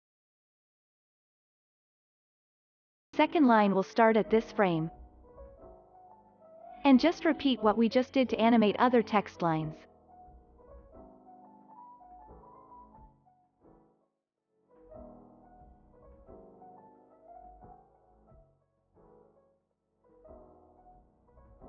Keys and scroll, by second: 4.9 alt+[, 5.3 ctrl+s, 7.9 ctrl+c, 11.3 ctrl+c, 12.8 ctrl+s, 17.3 alt+[, 17.8 ctrl+s.